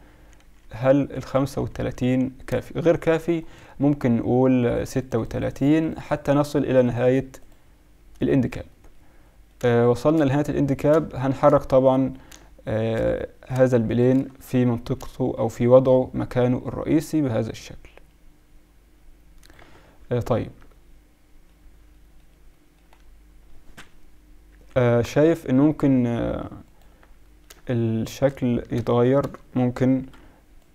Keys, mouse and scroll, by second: 0.6 KP_Subtract, 0.8 KP_Subtract, 1.1 KP_Subtract, 1.3-2.0 KP_Subtract, 2.9 drag, 4.6-9.2 drag, 10.7 middle click, 11.8-13.0 middle drag, 13.5 middle click, 15.9-16.6 middle drag, 16.6-17.6 drag, 19.6 z, 20.6 middle drag, 20.8 middle click, 21.0 middle drag, 22.5 middle click, 22.7 middle click, 23.1-24.4 middle drag, 24.4 KP_7, 24.8 Tab, 25.2 z, 28.7 a, 29.2 a, 30.0 b.